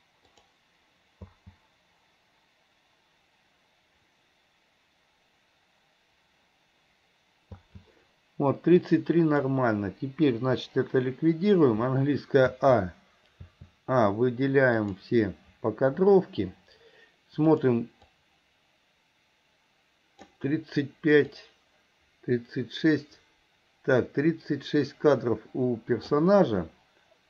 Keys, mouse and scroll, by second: 0.4 click, 1.4 space, 7.6 space, 8.8-9.4 drag, 12.6 a, 13.4 a, 14.9 click, 17.6 click, 18.2-20.5 drag, 21.4-26.3 drag.